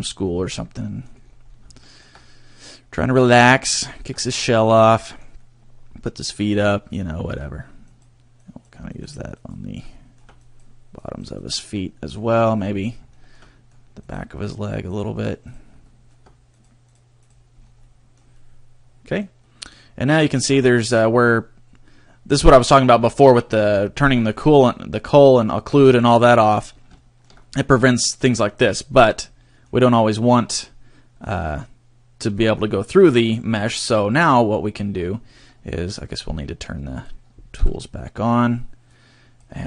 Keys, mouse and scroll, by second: 0.2 scroll up 2, 0.5 middle click, 1.2-1.6 scroll down 3, 1.7 shift+middle click, 2.1 middle click, 3.8 shift+middle click, 4.7 middle click, 4.7 scroll up 1, 5.3 middle click, 6.5-6.9 scroll up 2, 6.9 shift+middle click, 7.9 click, 8.4 click, 9.1 click, 9.4 click, 10.0 shift+middle click, 10.4 click, 11.0 click, 11.4 click, 11.9 middle click, 12.4 middle click, 13.1 shift+middle click, 13.5 middle click, 14.0 click, 14.5 click, 15.0 click, 15.5 click, 15.9 shift+middle click, 16.5 click, 16.9 click, 17.4 click, 17.6 scroll down 1, 17.7 middle click, 18.3 middle click, 20.5 scroll up 3, 24.3-24.9 scroll down 6, 26.0 middle click, 26.9 shift+middle click, 27.4 middle click, 28.9 scroll down 2, 29.1 middle click, 36.1 click, 37.5 t, 38.9 click.